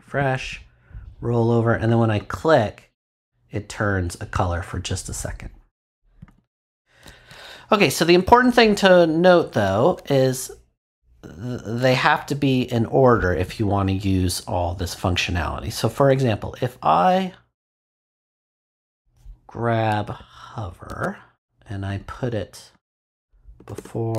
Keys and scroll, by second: 20.9 super+x, 23.5 Return.